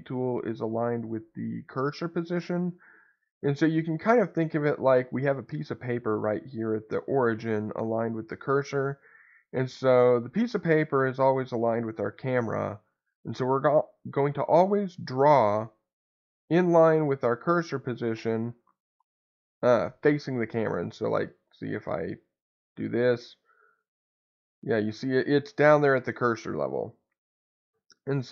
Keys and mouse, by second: 3.4 middle click, 9.2 middle click, 19.4-21.1 middle drag, 22.2-23.7 drag, 24.0-25.1 middle drag, 25.9-27.7 middle drag.